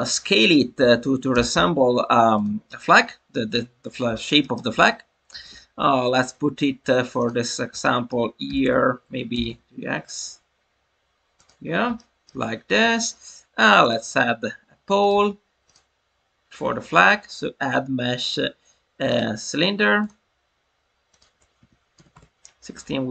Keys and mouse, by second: 1.3 g, 1.5 x, 2.3 click, 2.8 middle click, 3.8 Tab, 4.1 alt+middle click, 4.4 alt+middle drag, 7.1 click, 7.8 shift+middle drag, 8.4 g, 8.6 y, 9.0 Escape, 9.3 g, 9.4 x, 11.3 click, 11.9 shift+middle drag, 13.9-15.0 drag, 15.0 Tab, 15.6-19.2 drag, 19.9 click, 21.0-22.5 drag.